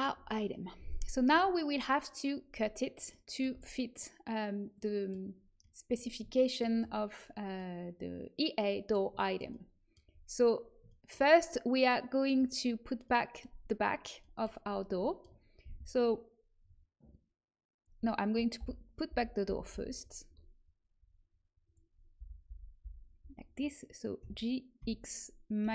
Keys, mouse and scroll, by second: 1.3 Tab, 2.4 a, 3.5 a, 7.5-8.9 middle drag, 12.1-14.2 drag, 14.6 middle click, 18.5 l, 19.0 l, 19.4 l, 20.0 l, 21.6-23.3 drag, 22.1 l, 24.1 g.